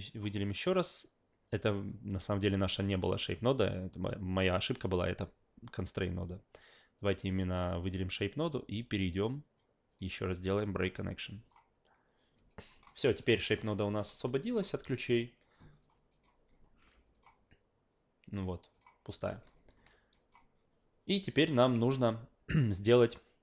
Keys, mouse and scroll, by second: 0.0 click, 6.8 click, 8.6-9.6 drag, 9.9 right click, 10.9 click, 11.4 click, 12.5 alt+right click, 12.8 alt+middle click, 13.2 alt+right click, 13.9 alt+middle drag, 14.4 alt+right click, 14.7 alt+middle click, 15.8 click, 16.1 alt+right click, 16.5 alt+middle click, 17.1 click, 18.7 click, 19.3 alt+right click, 19.6 alt+middle click, 20.1 click, 21.8 a.